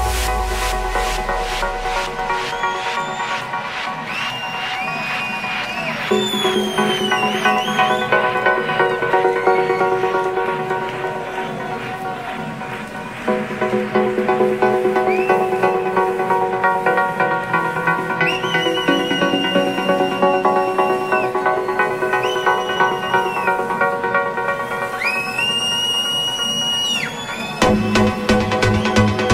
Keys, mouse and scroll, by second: 13.6 Delete, 16.2 click, 22.6 alt+click, 24.5-29.3 drag.